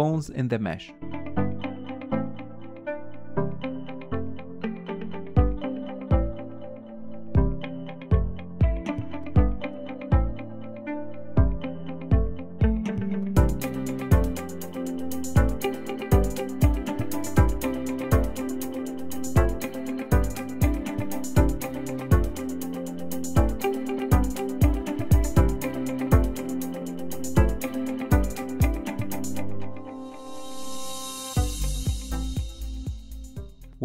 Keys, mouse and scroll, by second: 0.0-1.5 typing, 0.2 click, 1.0 click, 1.9 click, 2.4 ctrl+KP_1, 2.6 scroll up 1, 2.7 shift+middle click, 2.8 click, 2.9 shift+click, 3.2 g, 3.6 scroll up 2, 3.7 shift+middle click, 3.9 click, 4.1 g, 4.3 scroll down 1, 4.4 shift+middle click, 5.1 shift+click, 5.2 middle click, 5.4-11.6 typing, 5.7 shift+click, 6.0 ctrl+KP_1, 6.9 scroll down 2, 7.0 middle click, 7.3 middle click, 7.5 shift+click, 7.7 ctrl+KP_1, 7.8 scroll up 2, 9.3 middle click, 9.7 scroll up 2, 9.7 middle click, 10.1 scroll down 1, 10.6 shift+click, 10.9 scroll up 1, 12.2 Tab, 12.2 middle click, 12.3 Tab, 12.4 shift+click, 12.7 middle click, 12.9 h, 12.9 middle click, 13.2 KP_1, 13.3 scroll up 2, 13.4 shift+middle click, 13.5 click, 13.7 g, 14.0 r, 14.1 click, 14.4 middle click, 14.6-14.9 scroll up 1, 14.9 scroll down 4, 15.0 middle click, 15.2 shift+click, 15.4 h, 15.5 middle click, 15.6 KP_1, 15.7 shift+middle click, 15.9 KP_3, 16.3 click, 16.8 click, 17.0 shift+middle click, 17.6 ctrl+z, 17.8 click, 18.0 KP_1, 18.3 g, 19.0 g, 19.3 click, 19.4 click, 19.7 shift+middle click, 19.8 click, 20.1 KP_3, 20.6 click, 20.7-21.0 scroll down 6, 20.7 middle click, 21.0 KP_1, 21.2-21.6 scroll up 7, 21.2 shift+middle click, 21.4 shift+middle click, 21.6 KP_3, 21.7 scroll down 1, 21.8 scroll up 2, 22.1 click, 22.5 scroll down 1, 22.6 shift+middle click, 23.0 click, 23.2 h, 23.3 click, 23.6 KP_3, 23.7 scroll up 2, 23.8 shift+middle click, 23.9 click, 24.2 shift+click, 24.5 click, 25.3 alt+h, 25.5 shift+middle click, 25.7 scroll down 2, 25.9 click, 26.2 scroll up 2, 26.3 shift+middle click, 26.5 click, 26.7 click, 26.9 click, 27.6 click, 28.0 scroll down 3, 28.1 middle click, 28.4 KP_1, 28.5 shift+middle click, 28.7 click, 29.2 scroll down 2, 29.2 shift+middle click, 29.3 KP_3, 29.4-29.8 scroll up 3, 29.5 shift+middle click, 29.8 click, 29.9 click, 30.2 click, 30.4 ctrl+z, 30.6-32.8 typing, 30.8 click, 31.0 ctrl+z, 31.4 click, 32.3 click, 32.5 Tab, 32.6 middle click, 32.9-33.2 scroll up 3, 33.2 shift+middle click, 33.3 scroll down 2, 33.7 click.